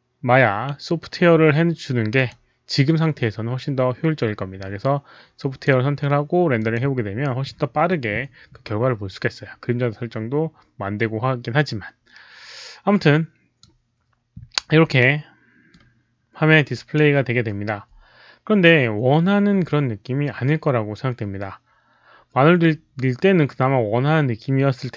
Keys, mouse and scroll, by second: 2.1 click, 3.1-5.6 drag, 6.5 click, 12.9-13.5 drag, 14.9 middle click.